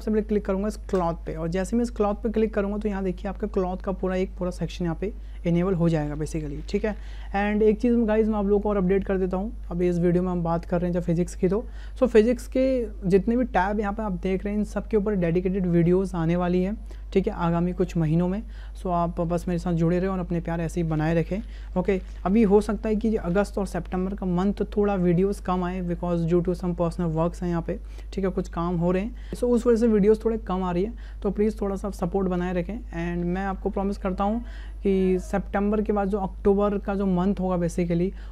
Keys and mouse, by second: 0.9 click.